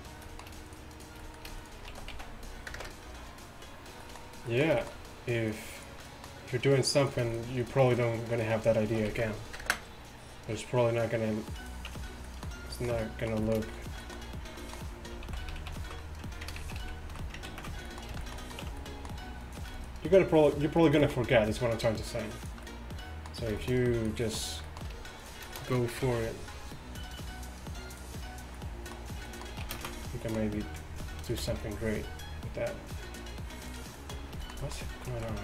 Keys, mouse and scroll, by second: 2.0 s, 5.5-8.9 drag, 8.9 s, 11.9 Tab, 12.1 click, 15.4 ctrl+z, 15.6 ctrl+z, 16.8 ctrl+shift+z, 17.0 ctrl+shift+z, 17.7 ctrl+z, 18.7 Tab, 21.8-22.8 drag, 21.8-22.8 right drag, 26.1 g, 29.7 ctrl+z, 31.4 ctrl+shift+b, 35.1 z.